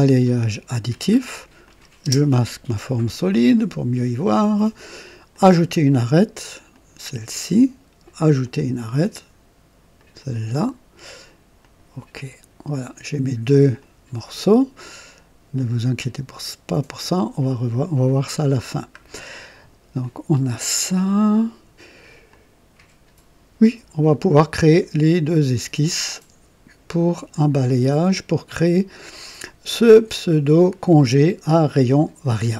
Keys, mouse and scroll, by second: 0.0 click, 1.6 click, 2.2 space, 2.8-3.2 scroll up 1, 3.3-4.0 right drag, 5.3 click, 6.7 click, 8.4 click, 9.9 click, 11.6 click, 13.8-15.7 drag, 17.4 click, 18.7 scroll down 1, 19.3 right click, 20.0-22.1 drag, 22.3-23.9 drag.